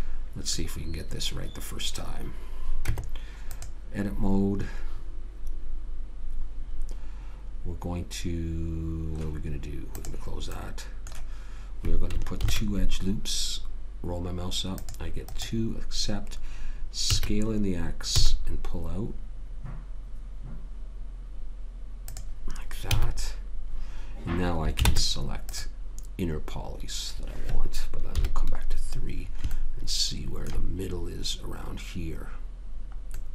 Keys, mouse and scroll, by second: 3.2 Tab, 4.7-6.3 middle drag, 10.9-12.7 middle drag, 12.7 ctrl+r, 17.4 s, 23.2 a, 25.2 ctrl+Tab, 28.5 KP_3.